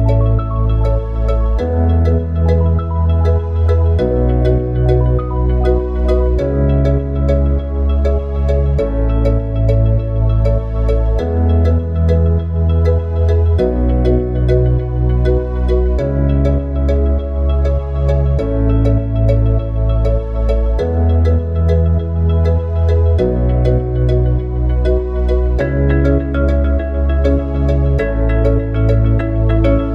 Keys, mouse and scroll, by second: 3.8 click, 7.2-10.3 drag, 13.7-16.1 drag, 17.8 click, 19.3 click, 21.1 click, 24.8 click, 27.1-29.9 drag.